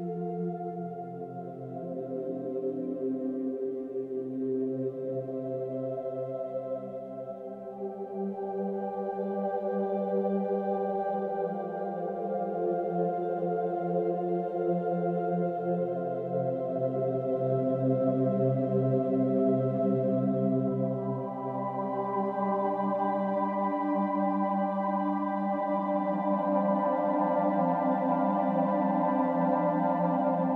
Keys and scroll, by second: 1.4 space, 1.5 ctrl+=, 2.1 ctrl+-, 2.5 ctrl+=, 2.9 ctrl+-, 3.3 space, 3.9 space, 12.8 ctrl+-, 13.8 ctrl+=, 15.6 Delete, 15.9 ctrl+alt+shift+n, 16.0 ctrl+alt+g, 16.1 space, 22.7 ctrl+-, 23.0 ctrl+=, 23.3 ctrl+-.